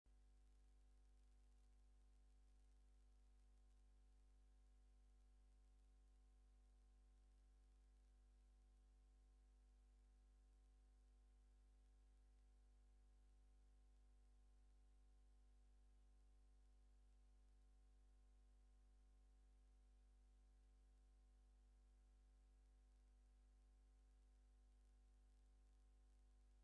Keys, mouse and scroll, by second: 1.8 right click, 2.5 click, 5.1 scroll down 2, 6.3 scroll down 1, 7.2 scroll down 2, 8.0 scroll down 2, 8.9 scroll down 2, 9.6 scroll down 1, 10.3 scroll down 2, 11.0 scroll down 2, 11.6 scroll down 2, 12.3 scroll down 2, 12.9-13.7 scroll down 4, 14.2 scroll down 2, 14.9 scroll down 2, 15.5 scroll down 2, 16.2 scroll down 2, 17.5 click, 18.5 click, 19.6 click, 20.8 click, 21.8 click, 23.4 scroll up 1, 24.2 scroll up 1, 24.9 scroll up 2, 25.5 scroll up 2, 26.2 scroll up 2.